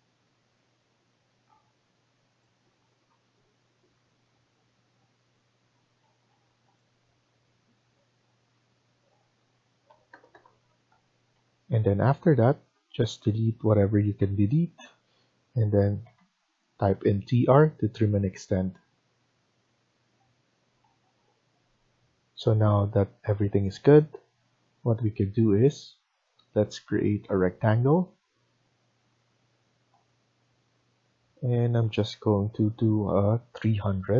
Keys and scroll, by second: 5.9 Escape, 6.2 Escape, 9.8 typing, 10.7 Return, 11.0 Escape, 14.1 Delete, 15.5-16.4 typing, 20.7 Escape, 20.9 Escape, 21.1 Escape.